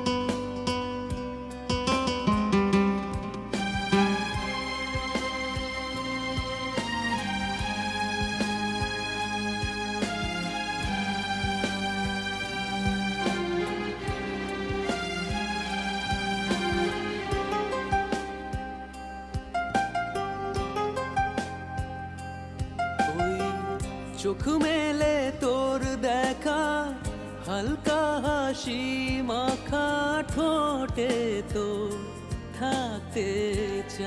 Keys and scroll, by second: 7.3 ctrl+=.